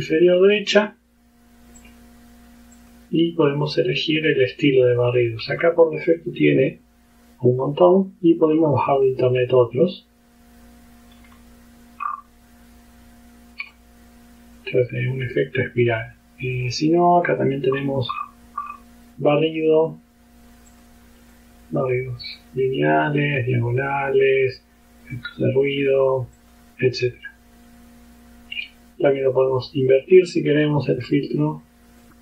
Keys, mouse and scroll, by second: 1.9 click, 2.8 click, 3.7 click, 5.1-5.8 scroll down 1, 6.1-6.6 scroll down 1, 8.5-8.9 scroll down 1, 11.2-11.6 scroll down 1, 12.1-12.5 scroll up 2, 13.7 click, 14.6-16.4 drag, 16.6 click, 17.3 click, 17.8 scroll down 2, 18.2-19.0 scroll up 4, 19.4 scroll down 2, 20.7 click, 21.4-22.6 drag, 23.1 click, 23.9 click, 24.6-26.1 drag, 26.4 click, 29.2 click, 30.2-31.4 drag.